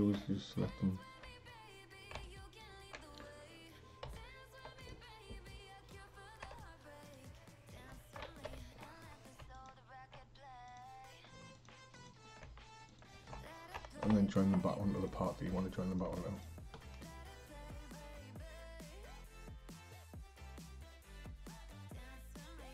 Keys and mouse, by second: 0.7 click, 2.2-4.1 shift+drag, 4.1 p, 6.5 Tab, 7.1 click, 8.5 alt+h, 9.6 shift+click, 10.7 click, 11.6 click, 12.0 click, 12.9 shift+click, 14.1 ctrl+j, 15.0 click, 15.5 h, 15.9 click, 16.2 h, 16.4 click, 18.0 click, 19.8 Tab, 21.1-22.7 typing.